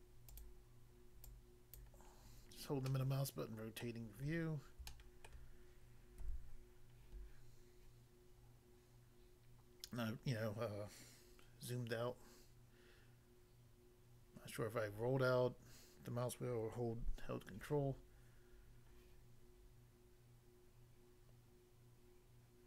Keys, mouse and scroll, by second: 0.3 click, 0.4 click, 1.2 click, 1.8 click, 2.1-2.5 scroll down 1, 2.8 middle click, 3.8 middle click, 4.2 scroll down 1, 4.8 shift+middle click, 6.2 a.